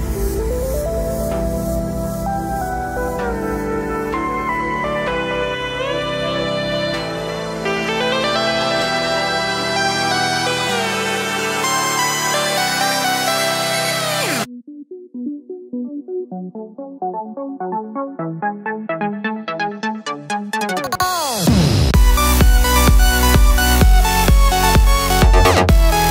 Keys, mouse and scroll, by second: 0.4 KP_Enter, 2.6 click, 3.0 click, 3.5 KP_Enter, 3.9-4.8 scroll down 1, 5.0 KP_0, 7.0-8.0 middle drag, 7.1 scroll down 2, 7.2 y, 7.6 scroll up 2, 7.8 y, 8.0 click, 8.3-9.6 middle drag, 8.4 y, 9.6 click, 9.9 Tab, 10.3 alt+click, 10.5 click, 11.5 z, 11.9 middle click, 12.8 click, 13.1 click, 13.4 shift+click, 13.6 middle click, 14.0 shift+click, 14.4 click, 14.8 click, 15.2 shift+click, 15.4 middle click, 15.9 shift+click, 16.0 middle click, 16.8 shift+click, 17.1-19.6 middle drag, 17.6-18.0 scroll down 2, 18.0 shift+d, 18.2 Return, 19.3-19.6 scroll down 1, 19.6 click, 19.9 Tab, 20.4-26.1 middle drag, 25.6-26.1 scroll down 1.